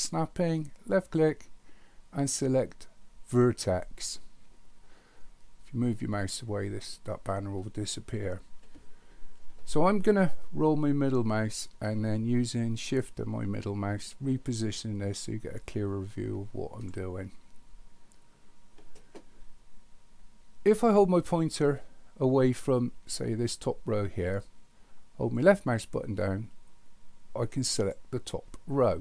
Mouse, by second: 0.9-4.8 drag, 13.4 middle click, 13.9-14.5 middle drag, 15.4 middle click, 16.1-16.8 middle drag, 25.5-27.9 drag.